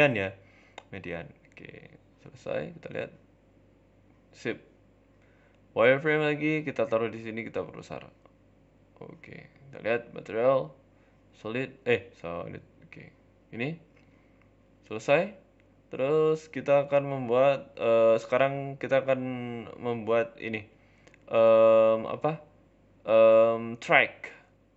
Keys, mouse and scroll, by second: 0.1 g, 1.1 scroll down 3, 1.3 z, 2.5 middle click, 3.1 middle click, 3.8 KP_7, 4.3-4.9 scroll up 2, 4.9 z, 6.0 g, 6.7 shift+d, 7.3 s, 9.0 z, 9.3 z, 9.9 middle click, 10.6 z, 11.4-12.1 scroll down 4, 11.5 z, 12.1 middle click, 12.4 Tab, 12.6 middle click, 13.1-13.6 scroll down 4, 13.3 middle click, 14.1 KP_3, 14.3 KP_1, 14.7 scroll up 4, 14.8 shift+middle click, 15.1 shift+a, 18.8 shift+s, 19.7 shift+a, 21.4 scroll up 3, 21.5 shift+middle click.